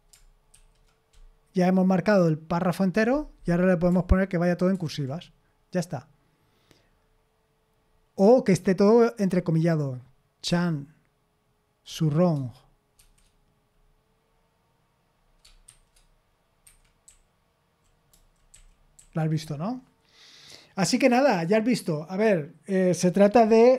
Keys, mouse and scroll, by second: 0.5 shift+], 4.7 shift+8, 10.4 typing, 11.8 typing, 12.9 typing, 15.6 typing, 16.6 Escape, 17.0-19.0 typing.